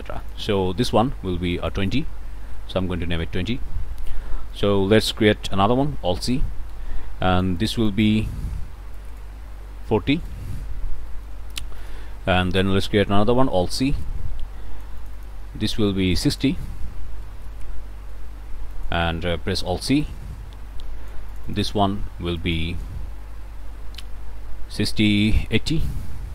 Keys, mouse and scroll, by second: 0.2 click, 1.6 click, 2.1-3.0 typing, 3.8 scroll up 1, 3.9 click, 4.5 click, 5.8 alt+c, 6.3-8.1 alt+drag, 9.0 click, 9.7-10.5 typing, 11.1 click, 11.8 click, 12.1 click, 13.4 alt+c, 14.0-15.4 alt+drag, 16.1 click, 16.9 KP_6, 17.0 KP_0, 17.2 Return, 18.1-18.5 scroll up 1, 18.7 click, 19.5 alt+c, 20.0-21.8 alt+drag, 22.4 click, 25.4 8, 26.0 Return.